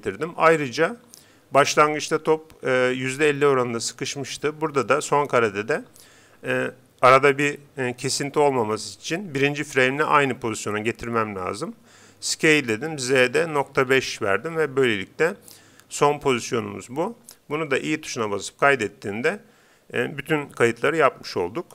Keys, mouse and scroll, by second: 12.2 s, 18.2 i.